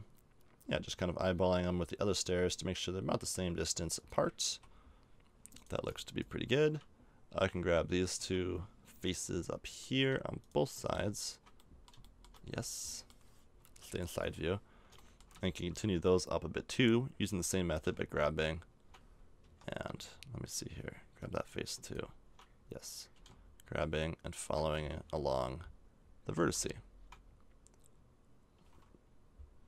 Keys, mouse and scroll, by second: 4.4 a, 5.5-7.4 right drag, 7.4 g, 9.1-10.9 middle drag, 10.9 g, 11.7 middle click, 12.4 middle click, 13.1 middle click, 13.6 KP_3, 17.7 g, 21.2-23.1 right drag, 23.1 g, 26.3 g.